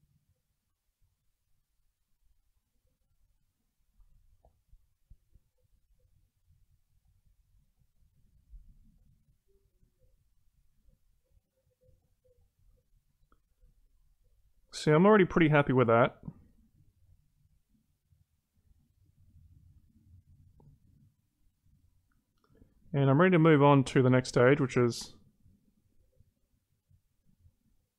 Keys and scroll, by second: 0.6 ctrl+z.